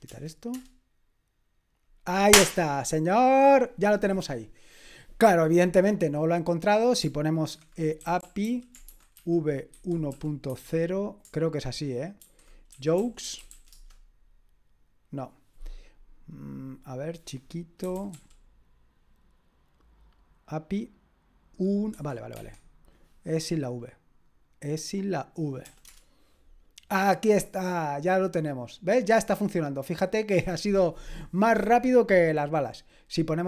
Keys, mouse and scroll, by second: 0.1 BackSpace, 0.6 Return, 5.9 click, 7.0 click, 8.0-10.5 typing, 12.2-13.5 typing, 13.8 Return, 16.6-17.8 drag, 17.6-18.6 typing, 21.9 Escape, 22.3 Escape, 23.6 click, 24.9-27.1 drag, 25.6 BackSpace, 25.9 Return, 30.0-33.4 drag.